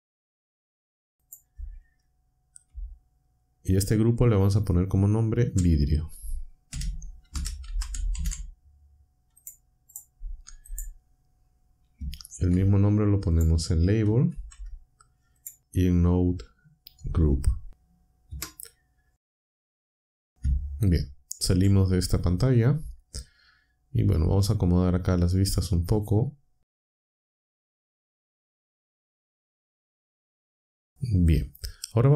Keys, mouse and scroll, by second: 0.0 n, 1.1 click, 5.5 shift+v, 6.7-8.6 typing, 9.4 click, 9.9 click, 10.6 click, 12.5 ctrl+c, 13.3 click, 14.3 ctrl+v, 15.3 click, 15.9 v, 18.3 Return, 21.5 ctrl+Down, 26.0 click, 27.5 n, 28.3 click, 28.6 click, 29.0-29.7 drag.